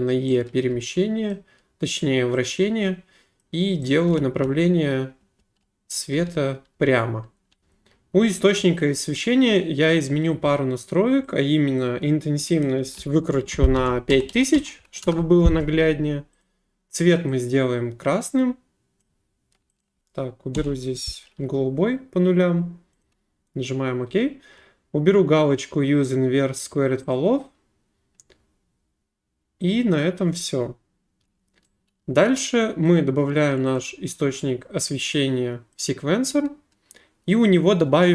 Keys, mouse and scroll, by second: 0.7 d, 1.3 right click, 3.4 click, 4.1-4.4 typing, 5.4-7.6 typing, 11.8 click, 12.6 click, 13.8-14.1 typing, 15.0 Return, 16.4 click, 19.0 click, 19.8 click, 20.5 typing, 21.1 click, 23.0 click, 24.9 typing, 27.1 click, 32.8 right click, 33.7 click, 35.7 click, 37.5 click.